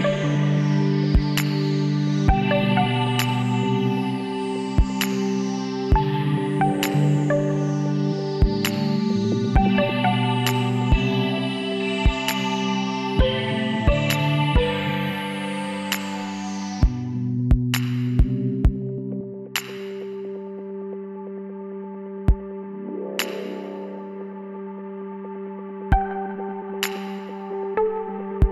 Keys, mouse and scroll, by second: 2.1-3.8 drag, 3.8 KP_1, 5.2 Tab, 6.5 ctrl+r, 9.1 ctrl+z, 10.3 ctrl+r, 12.9-16.1 middle drag, 15.0 s, 18.9 s, 20.9-22.7 drag, 23.5 s, 27.0 ctrl+z, 28.2 ctrl+r.